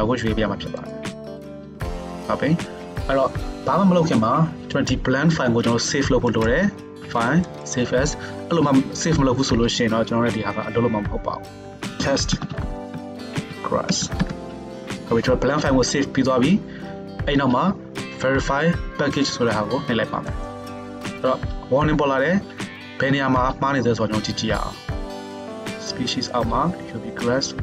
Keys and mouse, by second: 13.7-27.6 drag, 13.7-27.6 middle drag, 13.7-27.6 right drag.